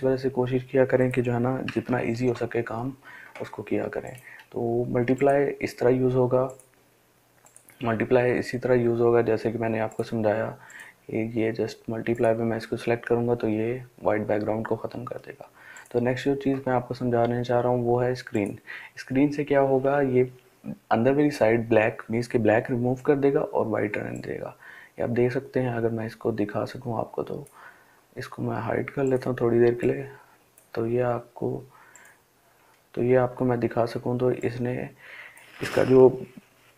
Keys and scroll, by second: 1.4 ctrl+d.